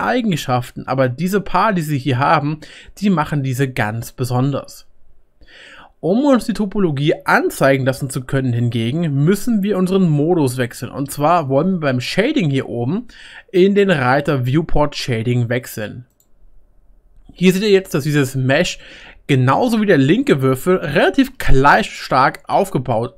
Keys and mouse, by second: 12.5-17.7 middle drag, 16.1 click.